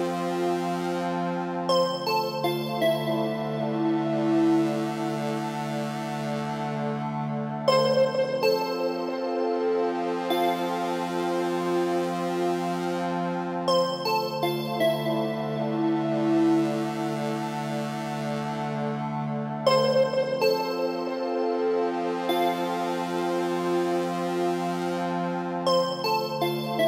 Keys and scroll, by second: 17.6 ctrl+t.